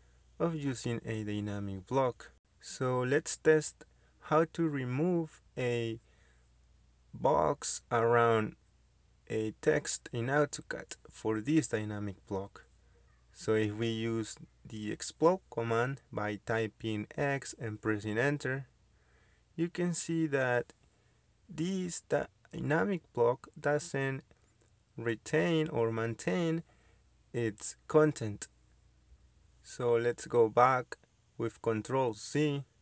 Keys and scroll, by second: 1.5 Escape, 4.0 Delete, 15.8 x, 16.1 space, 21.7 Escape, 24.9 Escape, 31.5 ctrl+z, 32.3 ctrl+z.